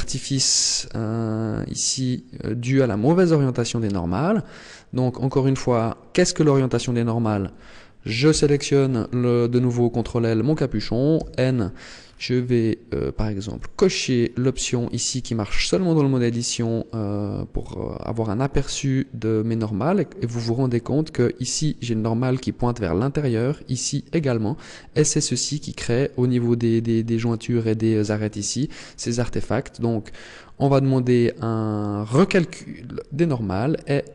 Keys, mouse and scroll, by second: 0.8 middle click, 2.8 Tab, 3.1 middle click, 4.4-4.8 scroll up 2, 5.5 right click, 8.1 ctrl+l, 11.1 n, 11.9-12.6 scroll down 6, 13.4 click, 14.3 scroll up 4, 18.3 click, 32.1 click.